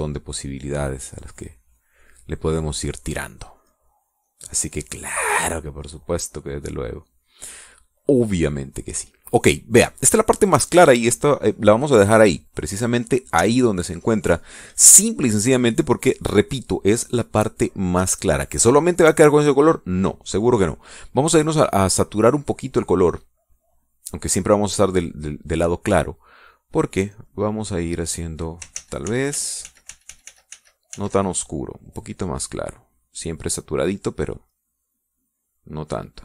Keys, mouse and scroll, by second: 4.3-8.1 drag, 8.6 click, 9.1 middle click, 9.1 click, 9.8 middle click, 10.5 click, 10.8-17.2 middle drag, 18.2 middle click, 22.7-23.9 drag, 24.2 click, 24.5 middle click, 24.8 middle click, 24.8 click, 26.0 middle click, 27.9-29.5 drag, 29.7 ctrl+z, 33.2 click, 35.4-36.2 drag.